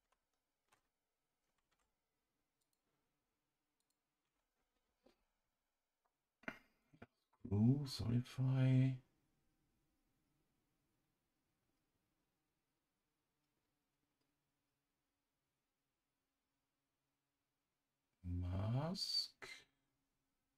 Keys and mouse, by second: 0.0 ctrl+shift+c, 1.7 Tab, 2.6 click, 3.8-20.5 drag.